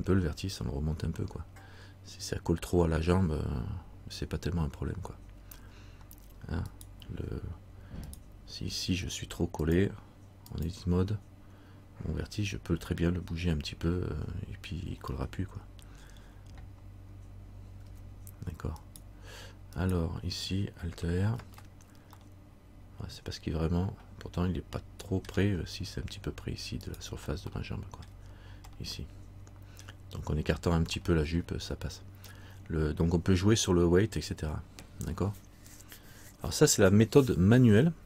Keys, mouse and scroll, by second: 6.9 right click, 7.0-8.2 scroll down 1, 8.2 right click, 9.8 click, 13.1 middle click, 18.0 Tab, 18.9 right click, 21.5 alt+r, 22.4 middle click, 27.0 right click, 28.2 middle click, 28.9 middle click, 31.2 middle click, 32.5-34.3 scroll down 1.